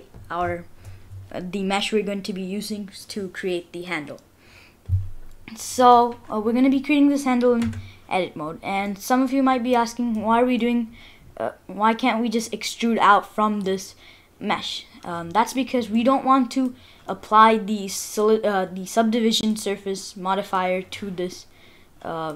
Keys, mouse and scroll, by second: 7.6 Tab, 8.7 scroll up 1, 8.9 middle click, 10.6 middle click, 13.7 middle click, 16.0 middle click, 17.0 middle click, 18.5 middle click, 19.8-20.1 scroll down 3, 20.0 middle click, 21.3 middle click.